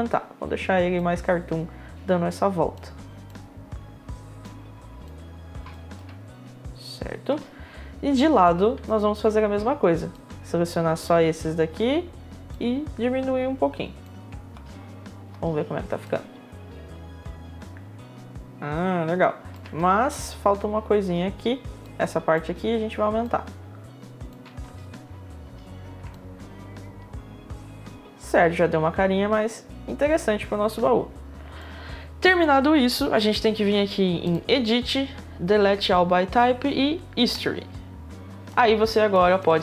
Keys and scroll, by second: 7.2 space, 14.1 space, 19.3 space, 24.2 space, 31.2 space.